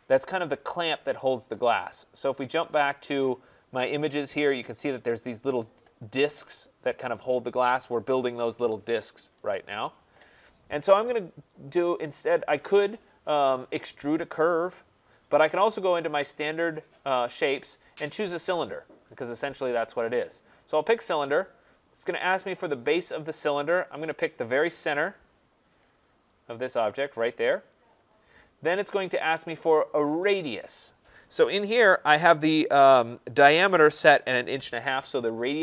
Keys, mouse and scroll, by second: 3.1-8.1 drag, 9.5 click, 20.9 click, 25.8 scroll, 26.1 middle click, 27.7 click, 31.9 click.